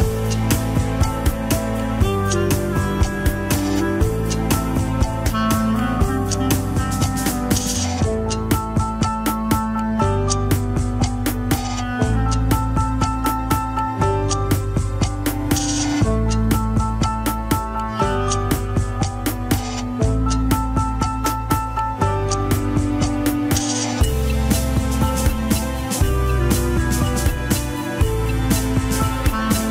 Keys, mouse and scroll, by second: 0.4-0.9 scroll down 3, 0.9-2.9 drag, 2.9 middle click, 3.4 scroll up 3, 3.7-4.9 drag, 4.9 scroll down 1, 5.0 middle click, 5.6-6.7 drag, 6.7 middle click, 7.1 scroll down 2, 7.5-9.8 drag, 9.8 middle click, 10.4-11.1 scroll up 1, 11.1-12.9 drag, 12.9 middle click, 13.1 KP_1, 13.6 alt+z, 14.5 ctrl+click, 14.5 scroll up 3, 15.2 r, 17.9 scroll up 1, 18.3 alt+z, 18.6-19.5 scroll up 1, 19.5 ctrl+click, 20.0 alt+z, 20.3-20.7 scroll down 1, 21.6 click, 21.9-22.4 scroll down 2, 22.4 click, 22.8-23.4 scroll up 2, 24.3 ctrl+z, 24.6-25.9 middle drag, 25.9 scroll down 1, 26.0 KP_1, 26.3 ctrl+Tab, 27.1 ctrl+s, 27.2 click, 27.5 click, 27.8 scroll down 1, 28.6 ctrl+Tab, 29.2 click.